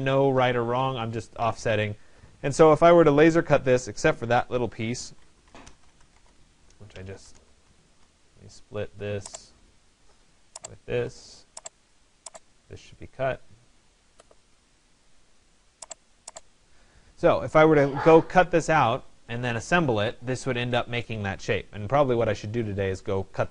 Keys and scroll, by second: 5.8 Return.